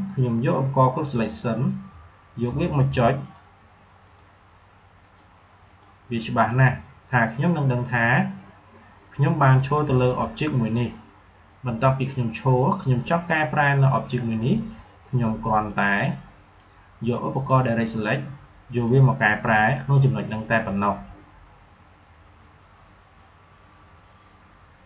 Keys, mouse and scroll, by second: 3.7 click, 9.4 click, 15.6-22.3 drag, 24.7 click.